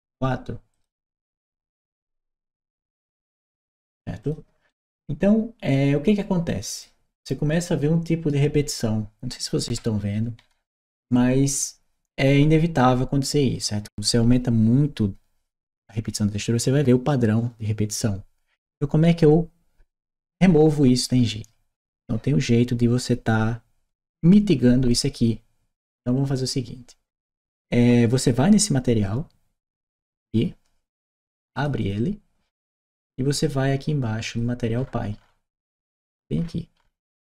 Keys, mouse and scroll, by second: 0.6 click, 1.5 Return, 2.8 click, 4.1 click, 4.5-6.6 right drag, 7.0 right click, 8.5-10.8 right drag, 28.4 click, 31.4 click, 31.7 click, 32.8-34.2 drag.